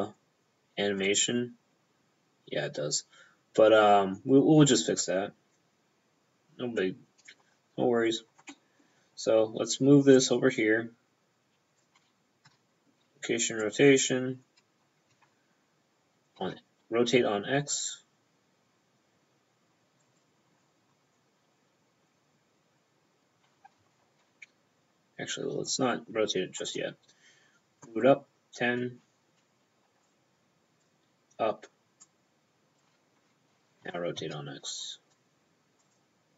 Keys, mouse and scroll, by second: 1.1 click, 8.6 middle click, 8.8 p, 10.2 click, 11.9 p, 12.5 i, 12.6 p, 13.7 click, 15.2 r, 16.5 x, 20.1 click, 20.2 p, 23.8 ctrl+p, 23.9 ctrl+z, 26.7 click, 26.8 p, 30.1 click, 30.9 p, 32.1 click, 32.9 p, 33.9 r, 34.3 x, 35.9 click.